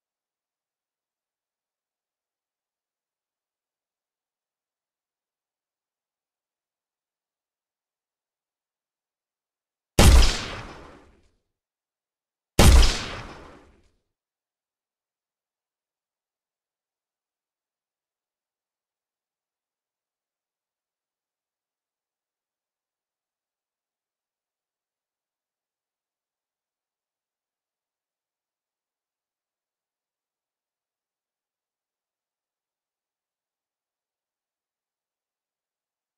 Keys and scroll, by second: 7.2 w, 14.0 Escape, 22.0-22.9 typing, 23.3 Return, 31.2 1, 32.2 Return, 35.5 w.